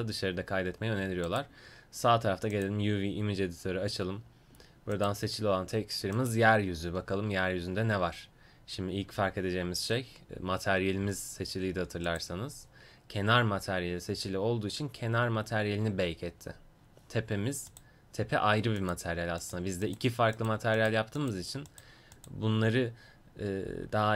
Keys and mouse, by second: 1.3-16.0 drag, 16.7-17.7 middle drag, 17.7-24.1 drag.